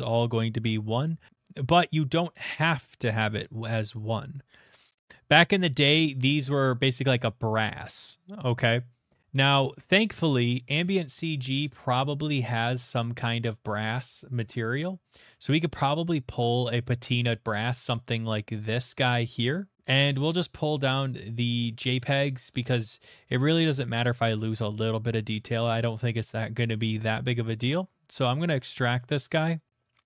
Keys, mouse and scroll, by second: 2.2 click, 4.3-5.0 scroll, 9.9 click, 10.6 right click, 10.6 click, 10.8 right click, 10.8 click, 11.0 right click, 11.1 click, 12.9-13.5 scroll, 14.0 scroll, 14.6 middle click, 15.9 middle click, 15.9 middle click, 16.1 middle click, 16.1 middle click, 16.2 middle click, 17.8 click, 18.4 click, 20.4 click, 26.3 right click, 27.8 click, 29.1 click.